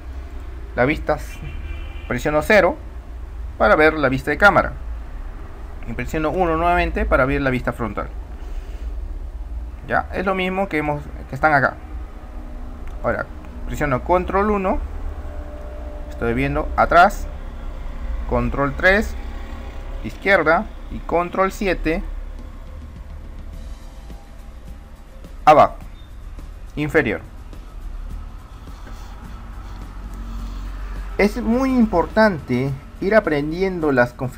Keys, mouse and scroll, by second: 0.4-2.4 drag, 2.7 KP_0, 6.5 KP_1, 12.8-13.4 drag.